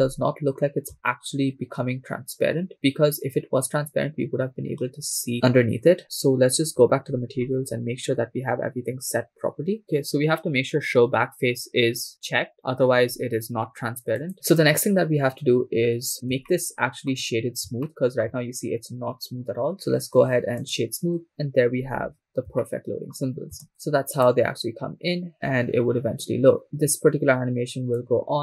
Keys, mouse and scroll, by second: 0.3-0.9 scroll up 4, 1.2-2.2 shift+middle drag, 2.2-2.5 scroll down 2, 2.6-3.0 scroll up 4, 6.0 click, 6.8-9.8 scroll down 10, 9.8 scroll down 2, 12.5 click, 16.3 scroll down 1, 16.5-17.3 shift+middle drag, 17.4 scroll up 2, 17.9-19.6 shift+middle drag, 19.9-21.3 drag, 21.5-22.1 scroll down 3, 22.3 scroll down 1, 22.6 shift+middle click, 24.1 shift+space, 24.7 click, 26.4-28.0 scroll down 3, 28.0-28.4 drag.